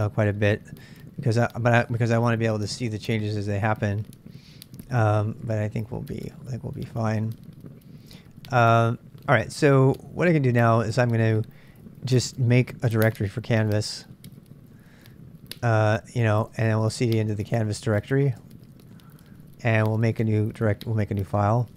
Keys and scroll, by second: 2.8 super+Tab, 5.4 super+Tab, 12.5-21.7 typing, 15.7 Return.